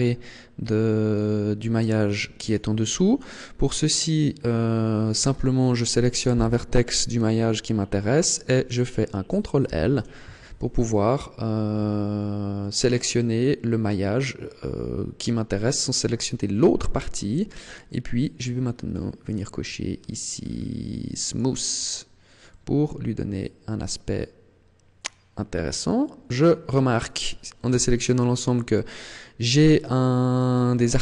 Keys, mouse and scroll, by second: 1.0 right click, 2.3 right click, 3.6 scroll up 1, 9.5 ctrl+l, 18.5-19.9 scroll down 5, 19.9-21.1 scroll down 5, 21.1 click, 22.3 middle click, 27.6 a, 28.6 middle click, 30.3 Tab.